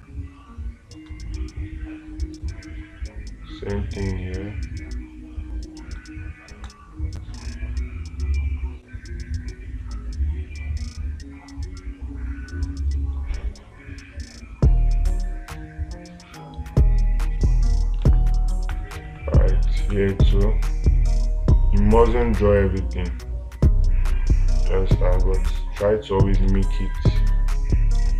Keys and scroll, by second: 18.5 space, 26.9 space.